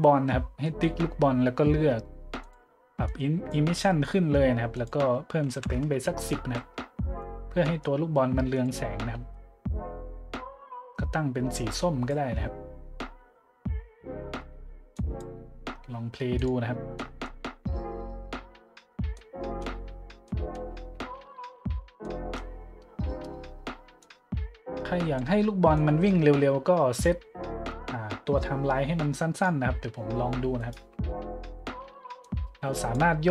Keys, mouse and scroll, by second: 2.4-2.7 drag, 3.1 click, 4.7 click, 5.5 KP_1, 5.6 KP_0, 5.7 KP_Enter, 6.4 a, 7.0-7.3 middle drag, 7.6-8.0 middle drag, 8.5 click, 9.3-12.0 drag, 14.3 middle drag, 14.9 click, 16.3-16.7 drag, 16.9-17.3 middle drag, 17.5 middle click, 17.6 middle click, 17.8 middle click, 19.2-19.6 drag, 20.3-20.6 drag, 22.0-22.3 middle drag, 24.0-25.2 drag, 25.8 middle drag, 27.0 middle click, 29.3 click, 30.6 middle click, 32.2 click.